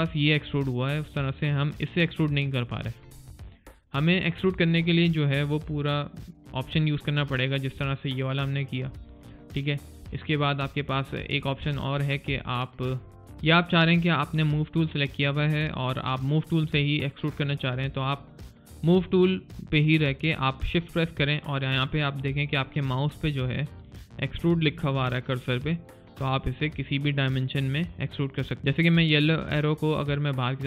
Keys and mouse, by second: 3.5 click, 7.7 alt+click, 8.9 alt+right click, 9.2 alt+click, 9.6 alt+right click, 9.9 alt+click, 10.6 alt+middle click, 12.3 alt+click, 13.3 alt+middle click, 13.8 alt+click, 28.6 click.